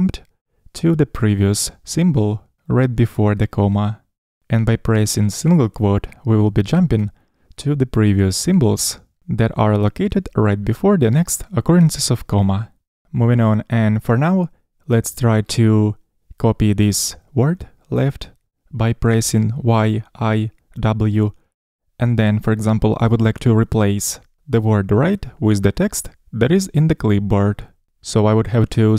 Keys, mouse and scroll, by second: 7.9 ', 19.8-20.3 typing.